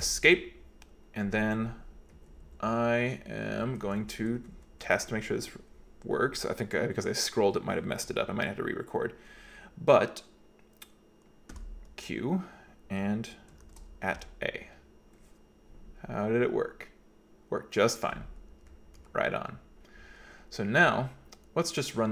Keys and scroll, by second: 0.0 Escape, 2.2 Down, 2.5 Down, 3.2 Right, 3.5 Right, 3.8 Right, 3.9 Right, 4.2 Right, 4.4 Right, 4.6 Right, 4.8 Right, 5.0 Right, 5.3 Right, 11.6 q, 13.7 shift+2, 14.2 a.